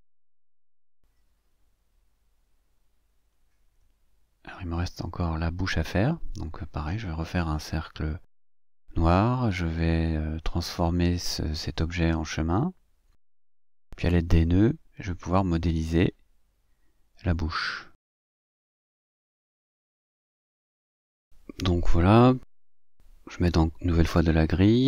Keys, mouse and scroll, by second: 0.2 click, 0.7 shift+click, 1.8 click, 2.6 click, 3.9 ctrl+scroll down 2, 5.1 scroll up 2, 5.4 scroll down 2, 6.2-6.5 scroll down 2, 6.9 click, 8.0-9.4 ctrl+shift+drag, 10.7 click, 11.4 click, 13.6 click, 14.4 click, 15.7 click, 17.9-19.9 drag, 20.5-21.6 drag, 22.3-24.8 drag.